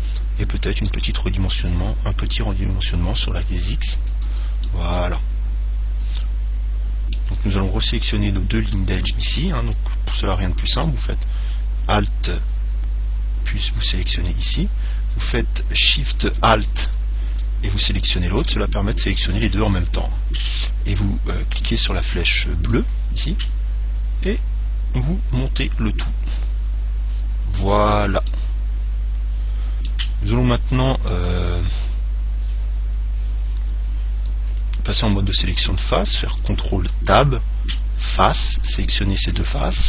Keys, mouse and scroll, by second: 1.1 s, 1.7 click, 4.5 click, 4.9-6.9 middle drag, 11.0 right click, 17.5 right click, 22.9 click, 28.6-32.7 middle drag, 37.2 ctrl+Tab, 38.9-39.8 right drag.